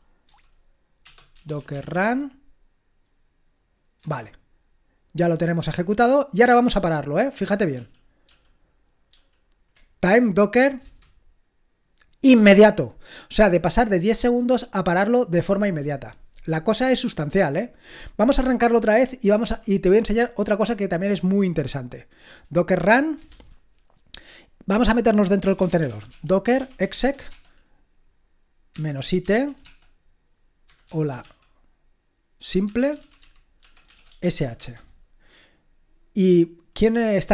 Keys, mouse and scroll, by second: 0.0-0.3 typing, 4.0 Return, 7.7 ctrl+p, 8.3 ctrl+p, 9.1 ctrl+p, 10.8 Return, 18.6 ctrl+p, 19.2 ctrl+p, 23.2 Return, 25.2-27.6 typing, 29.0-34.9 typing.